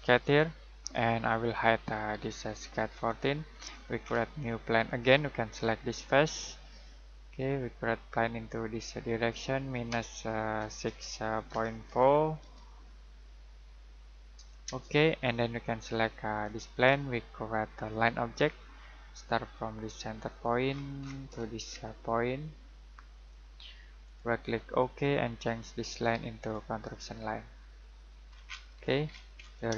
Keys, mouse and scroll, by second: 0.2 click, 3.5 scroll down 1, 3.7-4.0 scroll up 1, 4.8 click, 10.5-12.9 typing, 14.6 Return, 16.4 click, 20.6-23.1 scroll down 1, 23.1 click, 24.0 right click, 24.7 click, 26.4 right click, 27.9 click, 28.3 scroll down 1, 28.4-29.7 scroll up 1.